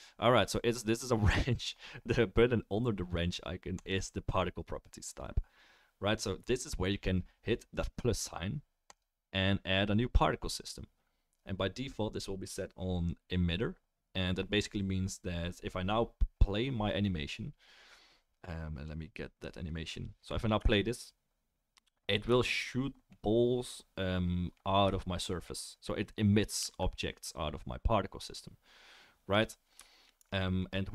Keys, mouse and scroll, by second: 3.7-22.0 middle drag, 16.9-22.0 drag, 16.9-22.0 right drag, 20.6 space, 26.6 space, 30.1-30.6 alt+middle drag.